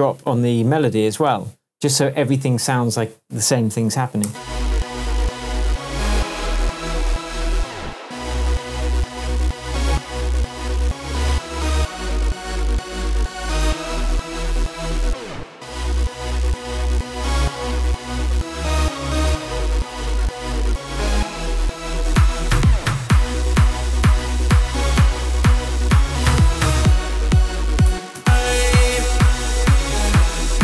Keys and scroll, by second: 0.8 super+v, 4.2 space, 18.6 super+d, 27.9 space.